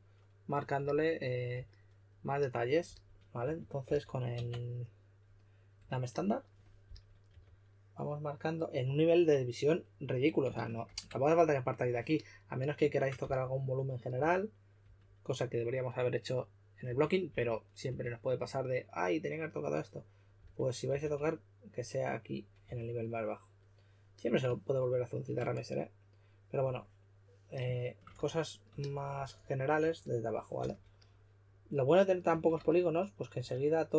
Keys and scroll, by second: 2.8-4.4 typing, 4.3 Tab, 6.8-7.2 typing, 10.8 shift+d, 13.1-14.6 typing, 16.6-17.8 typing, 20.3-21.3 typing, 22.6 4, 29.1-30.5 typing, 32.2 typing.